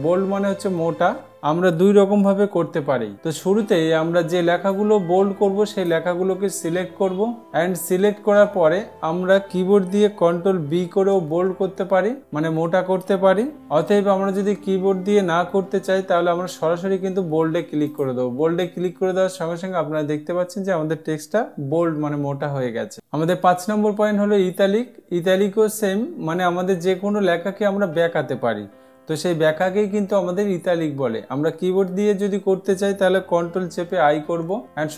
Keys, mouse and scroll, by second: 5.3 click, 11.7 ctrl+b, 18.5 click, 34.6 ctrl+i.